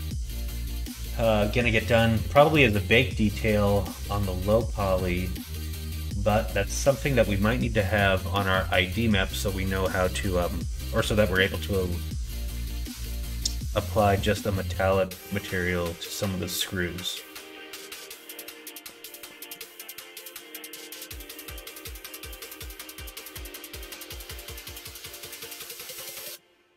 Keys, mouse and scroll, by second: 10.2 middle click, 11.4 middle click, 12.1 middle click, 13.4 middle click, 13.8 shift+middle click, 14.7 middle click, 15.2 middle click, 17.7-19.5 middle drag, 20.3 middle click, 21.0 middle click, 21.6 middle click.